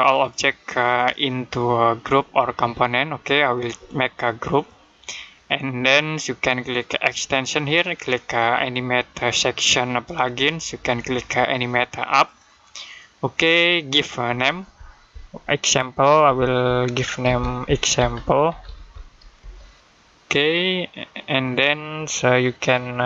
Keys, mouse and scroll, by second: 0.8 right click, 4.7 click, 7.0 click, 12.1 click, 16.1-19.2 typing, 21.3 click.